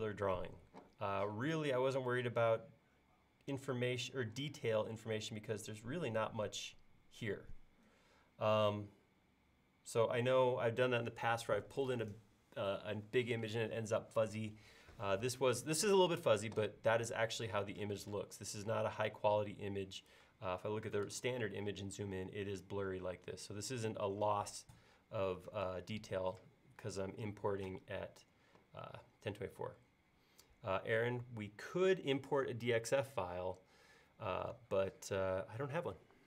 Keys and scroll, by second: 23.7-24.4 typing.